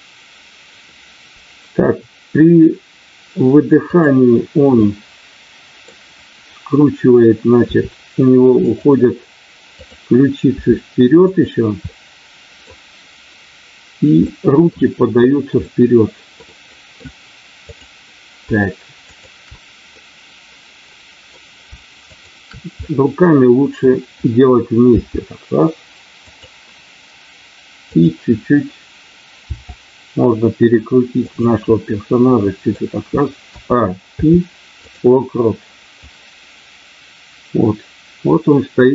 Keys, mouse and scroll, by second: 3.8 click, 4.8-6.0 middle drag, 7.6 r, 8.6 click, 9.7 click, 11.3 click, 11.9 middle click, 14.3 middle click, 15.6 middle click, 16.5 middle click, 17.6 click, 19.1 shift+click, 20.0-21.3 middle drag, 22.3 shift+click, 22.7-23.9 middle drag, 24.9 g, 26.2 click, 27.7 click, 29.5 r, 31.7 middle click, 34.1 i, 36.1-38.9 drag.